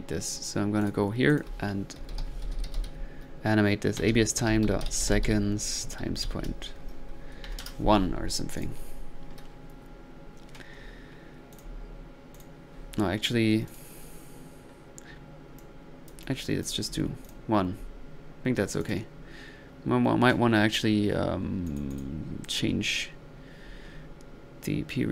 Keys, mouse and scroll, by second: 0.8 click, 1.3-1.8 drag, 8.6 click, 8.9 1, 13.7-14.1 drag, 18.8 drag.